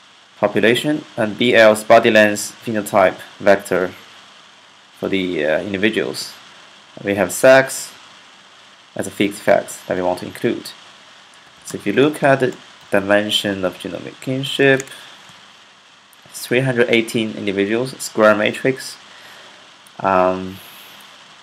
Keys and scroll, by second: 11.0-14.5 typing, 17.0-17.7 typing.